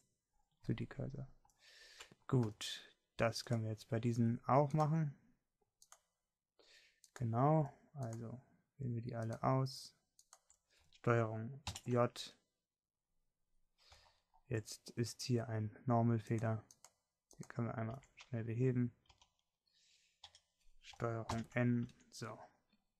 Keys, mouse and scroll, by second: 2.3 middle click, 13.0 ctrl+j, 17.6-19.3 drag, 19.3 Tab, 20.5 a, 21.6 l, 22.7 ctrl+n.